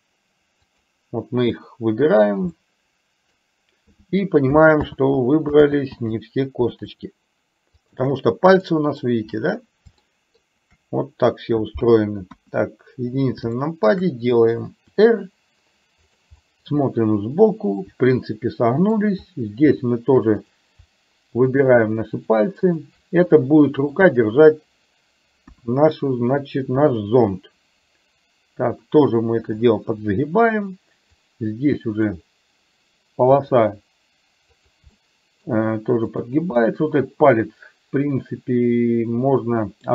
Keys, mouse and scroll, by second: 1.7 click, 2.6 middle click, 4.9 ctrl+z, 5.7 ctrl+z, 7.8 shift+click, 8.7 middle click, 10.1 shift+middle click, 12.3 KP_1, 13.7 middle click, 15.1 r, 16.4-18.9 middle drag, 21.6 shift+click, 22.2 shift+click, 23.3 middle click, 25.4 KP_1, 26.9 r, 31.2-32.2 drag, 33.3 r, 34.9 middle click, 36.7-39.9 middle drag.